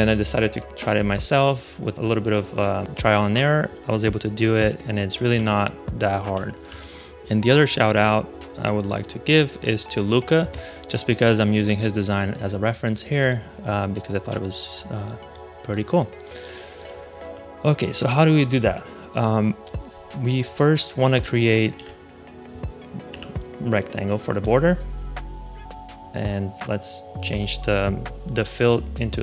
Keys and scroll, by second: 5.2 shift+super+], 6.6 shift+super+[, 14.6 space, 21.7 a, 23.0 r.